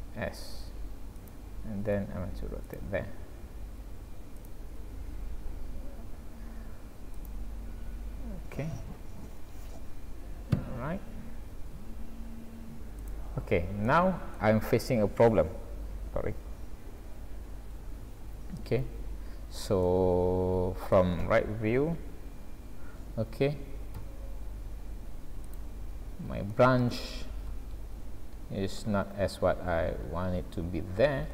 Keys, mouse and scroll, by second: 2.0 r, 3.2 s, 4.8 s, 11.5 s, 13.5 scroll down 3, 13.9 middle click, 18.2 ctrl+alt+q, 18.9-19.6 scroll up 3, 19.9 shift+middle click, 21.3-22.3 scroll up 2, 23.1-23.6 scroll up 1, 24.0 g, 25.9 scroll up 1, 26.5 shift+middle click, 27.6-28.1 shift+scroll up 3, 28.6-30.0 scroll down 5, 30.0-30.8 scroll up 4, 31.0-31.3 scroll down 3.